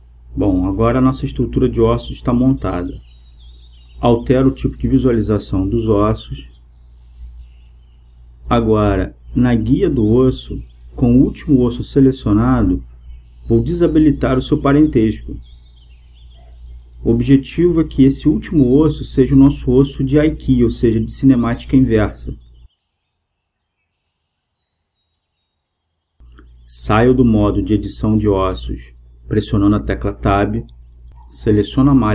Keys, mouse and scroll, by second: 5.1-7.7 drag, 7.7-9.5 right drag, 9.7-13.1 middle drag, 13.1-15.3 drag, 15.6-17.6 drag, 19.1-21.0 drag, 23.0-24.8 right drag, 27.1-28.9 right drag, 31.9 Tab.